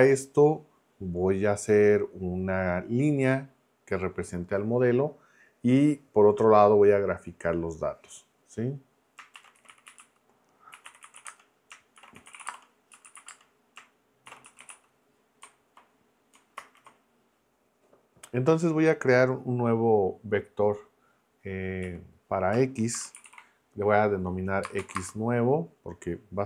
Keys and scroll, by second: 9.1-15.2 typing, 16.6 ctrl+Return, 17.4 Return, 21.8-25.0 typing.